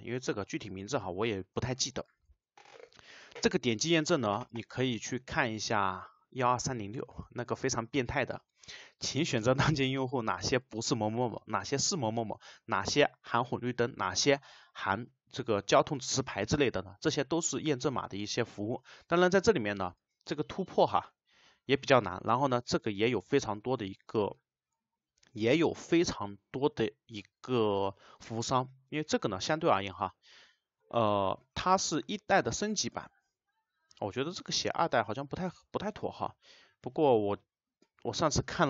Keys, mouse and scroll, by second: 1.6 Return.